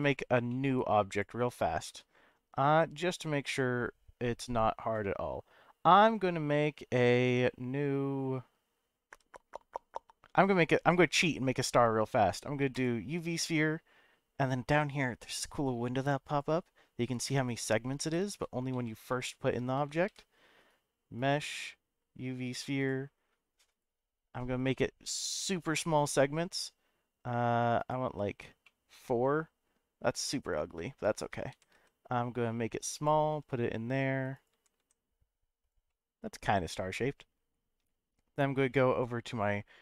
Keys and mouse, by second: 0.0 click, 0.5 middle click, 1.1 click, 1.8 shift+a, 15.5 click, 16.2 click, 17.4 click, 18.3 ctrl+z, 20.1 shift+a, 23.1-23.9 drag, 23.1-23.7 middle drag, 23.1-23.7 right drag, 24.6-26.1 drag, 27.8 click, 28.7-31.1 middle drag, 31.5 g, 31.7 z, 32.9 click, 33.3 s, 34.3 click, 34.5 g, 34.8 z, 35.6 click, 36.0-37.2 middle drag.